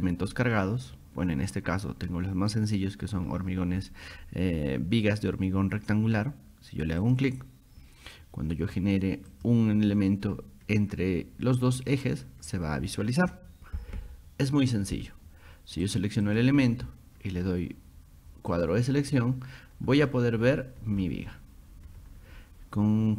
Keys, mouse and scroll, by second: 0.3 scroll up 2, 3.2-3.6 scroll down 2, 3.8 scroll down 2, 4.1 scroll up 2, 7.0 click, 9.3 click, 11.8 click, 15.9 click, 16.3 click, 18.6 click, 20.0 click, 20.4 scroll down 2, 21.0 scroll up 2.